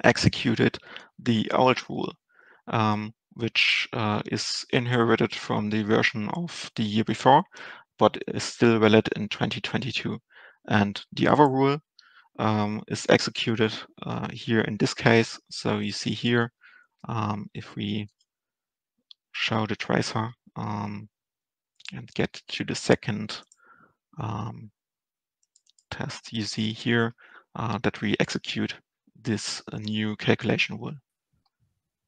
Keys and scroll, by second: 19.5 ctrl+alt+shift+Return.